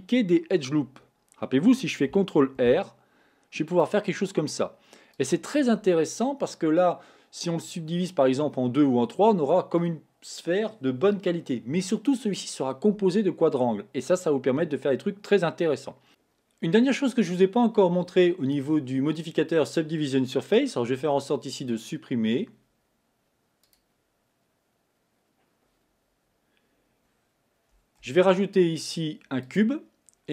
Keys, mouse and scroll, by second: 2.9 ctrl+r, 21.4 x, 23.8 click, 28.2 shift+a.